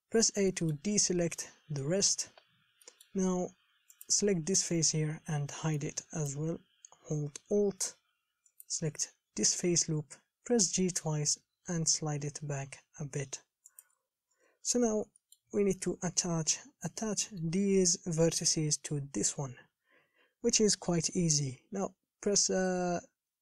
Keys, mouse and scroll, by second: 0.3 a, 0.7 shift+middle click, 1.2-2.0 scroll up 3, 2.0 middle click, 2.5-3.1 scroll down 5, 3.1 shift+middle click, 3.7-4.3 scroll up 1, 4.3 click, 5.4 h, 6.0-8.8 middle drag, 8.8 alt+click, 10.8 g, 14.5 KP_1, 14.9 scroll up 5, 15.4-20.0 shift+middle drag, 20.0 scroll up 3.